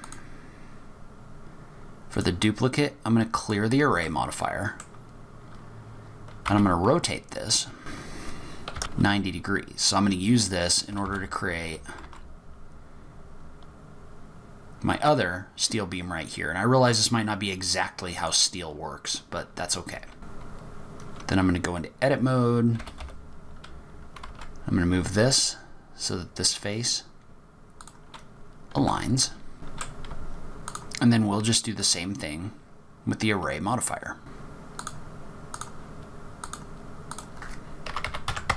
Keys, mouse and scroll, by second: 2.1 click, 3.4 click, 4.0 middle click, 5.1-6.5 scroll down 1, 6.5-6.8 scroll down 2, 6.5 r, 8.3 r, 9.4-10.9 scroll up 1, 10.9 scroll up 4, 10.9 g, 18.6-19.2 scroll up 3, 19.2-19.9 scroll down 5, 19.9 g, 20.6 Tab, 20.8 click, 20.8 middle click, 20.9 z, 21.0 click, 21.2-21.7 scroll up 10, 21.7-22.7 scroll down 6, 22.7 scroll down 2, 22.7 g, 28.7 Tab, 29.2 middle click, 29.7 z, 29.8-30.3 scroll down 6, 29.9 middle click, 30.1 shift+middle click, 30.3 middle click, 30.6 click, 34.3 click, 34.3 click, 34.4 click, 34.6 click, 35.0 click, 35.4 click, 35.6 click, 36.0 click, 36.2 click, 36.6 click, 36.6 scroll down 3, 36.7 click, 36.8 click, 36.9 click, 37.1 click, 37.6 click, 37.7 middle click, 37.7 scroll up 2, 37.8 middle click, 38.1 middle click.